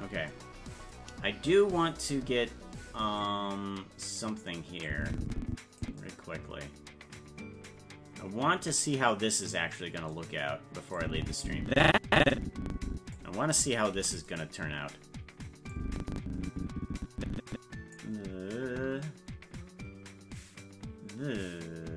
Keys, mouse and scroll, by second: 4.9 click, 11.0-13.1 drag, 13.9 i, 15.7-17.9 drag.